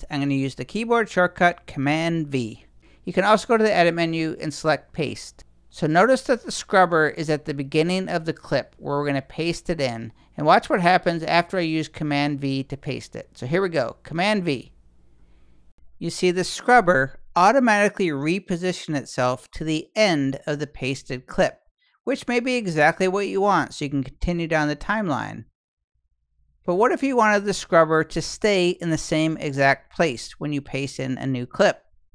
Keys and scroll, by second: 13.4 super+v.